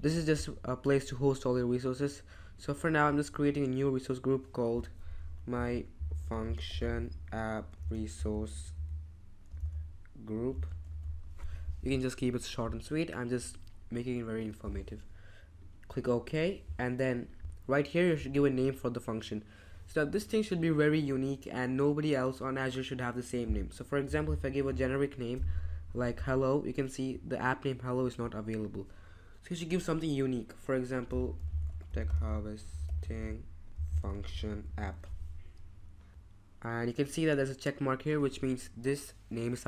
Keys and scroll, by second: 5.1-11.5 typing, 23.8-25.2 typing, 30.8-35.4 typing.